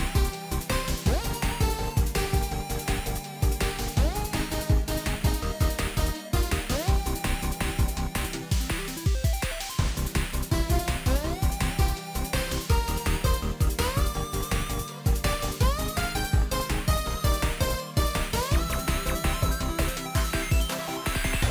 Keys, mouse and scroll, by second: 4.0 ctrl+j, 5.1 double click, 8.5 ctrl+t, 9.9 alt+click, 16.7 ctrl+click.